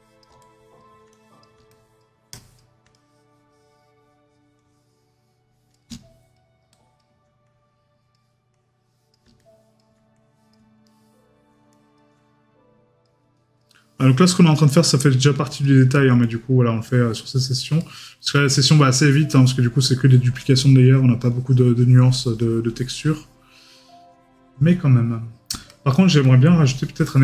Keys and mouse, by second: 10.8 middle click, 17.8 middle click.